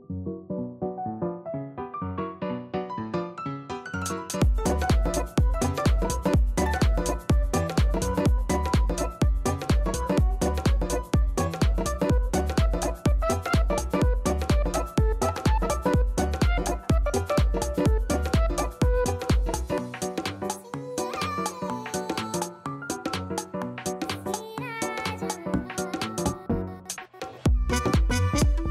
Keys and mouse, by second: 0.7 click, 1.7 click, 2.4 click, 4.6 click, 8.3 click, 14.9 alt+click, 15.6 alt+middle click, 15.8 alt+right click, 16.1 alt+middle click, 16.3 alt+right click, 17.1 alt+middle click, 17.3 alt+right click, 17.7 alt+middle click, 28.5 alt+right click, 28.6 alt+click.